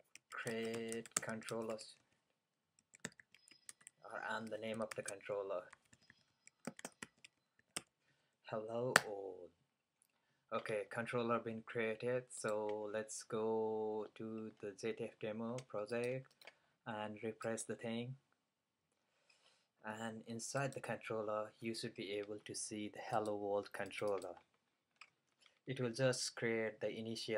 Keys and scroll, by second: 0.0-10.0 typing.